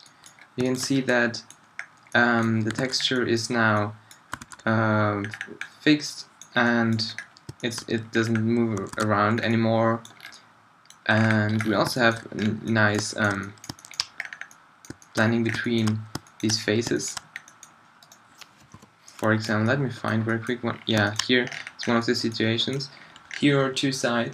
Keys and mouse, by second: 1.7-2.2 middle drag, 2.8 alt+a, 4.4 alt+a, 8.9 alt+a, 13.6 middle drag, 13.9 middle click, 14.3 middle click, 14.4 middle click, 15.1 middle click, 18.7 -, 19.2 click, 19.6 drag, 20.4 middle drag, 20.8 middle click, 21.9 middle click, 22.8 middle drag.